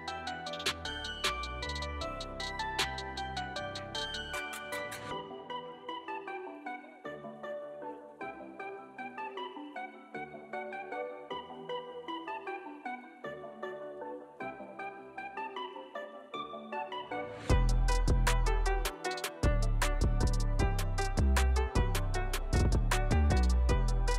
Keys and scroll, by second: 0.3 Tab, 0.8 alt+q, 1.6 Tab, 2.1 alt+z, 3.5 alt+z, 3.8 alt+q, 4.0 alt+q, 4.7 alt+q, 5.2 Tab, 5.6 alt+q, 5.8 Tab, 6.0 Tab, 6.3 Tab, 6.7 alt+z, 6.9 alt+z, 7.1 alt+z, 7.9 g, 8.7 g, 9.1 alt+z, 9.4 alt+q, 9.6 alt+q, 13.1 j, 15.1 j, 16.2 shift+x, 17.2 shift+x, 18.3 g, 19.4 g, 20.5 shift+x, 21.6 ctrl+z, 23.2 3.